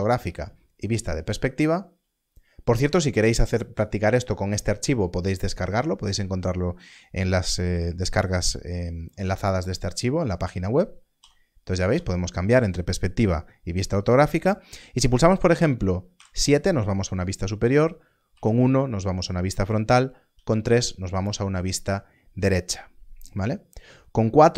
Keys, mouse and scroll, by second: 0.9 KP_5, 1.9 KP_5, 11.2 KP_5, 11.8 KP_5, 16.1 KP_7, 18.3 KP_1, 20.3 KP_3.